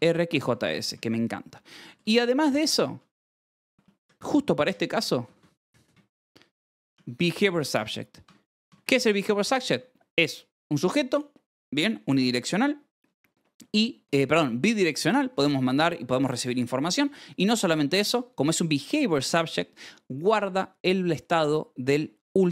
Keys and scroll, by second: 0.4 Escape, 0.6 k, 0.8 ctrl+s, 2.3-8.6 typing, 2.8 Escape, 7.8 Escape, 8.2 ctrl+s, 9.6 Escape, 13.3 Escape, 13.5 l, 17.5-18.4 typing, 20.9 Escape.